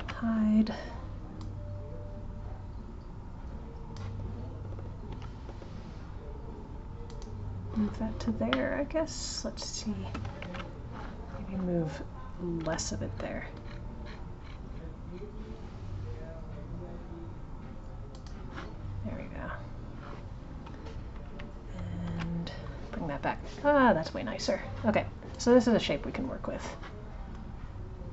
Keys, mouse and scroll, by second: 1.3 click, 10.4 ctrl+z, 12.6 g, 22.0 alt+h, 25.3 click.